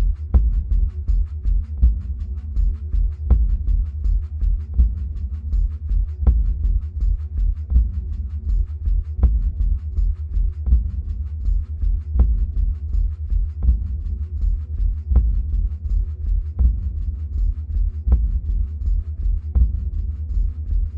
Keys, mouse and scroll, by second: 0.8 ctrl+z, 18.3-20.9 drag.